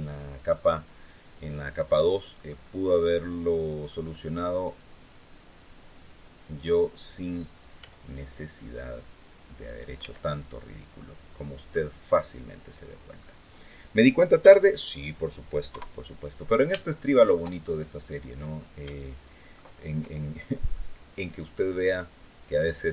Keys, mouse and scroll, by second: 0.7 click, 1.9 click, 2.9 middle click, 5.1 click, 6.2 right click, 7.5 x, 7.8 click, 9.4 right click, 9.7 x, 10.0 click, 11.8 click, 12.5 scroll down 1, 12.9 scroll up 1, 14.1 KP_7, 15.4 KP_3, 16.5 shift+click, 17.3 shift+scroll up 1, 18.1-18.5 scroll down 2, 18.6 shift+middle click, 20.3-20.9 scroll up 2, 22.5-22.9 scroll down 2.